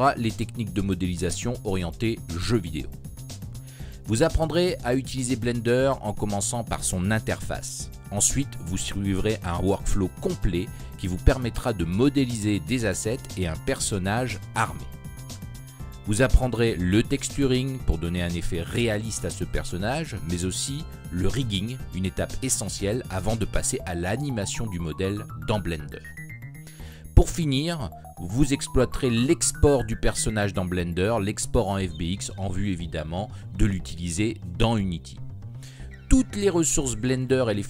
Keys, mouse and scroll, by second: 0.0 g, 1.9 right click, 3.5 right click, 3.5 l, 4.6 shift+d, 5.0 click, 5.1 s, 5.3 click, 5.7 g, 6.4-6.9 right drag, 6.9 click, 7.3 KP_1, 9.1-9.5 middle drag, 9.7-10.2 middle drag, 10.2-12.3 right drag, 12.3 z, 12.4-12.8 middle drag, 13.4-13.9 right drag, 13.9 alt+m, 15.9 alt+m, 19.0 click, 20.6-21.8 drag, 21.8-22.2 middle drag, 23.4-25.2 middle drag, 25.7-27.1 drag, 27.1 middle click, 28.3 middle click, 29.2-30.8 drag, 29.4-29.8 middle drag, 30.8 ctrl+z, 31.6-31.9 drag, 32.9-33.4 middle drag, 34.6 click.